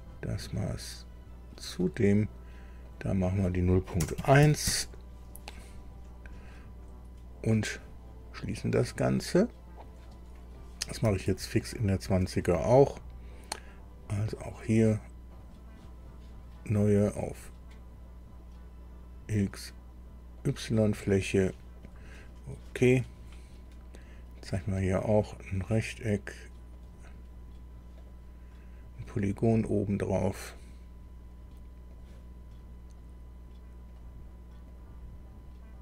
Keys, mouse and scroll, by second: 1.5 click, 2.8 click, 4.0 KP_0, 4.2 KP_Decimal, 4.4 KP_1, 4.6 KP_Enter, 6.2 scroll down 2, 8.8 click, 11.3 alt+Tab, 15.3 click, 16.3 scroll down 2, 20.4 click, 21.8 click, 24.4 click, 25.8 click, 26.8 click, 27.4-27.7 scroll up 2, 28.0 right click, 31.9 click, 33.9 click, 34.7 click.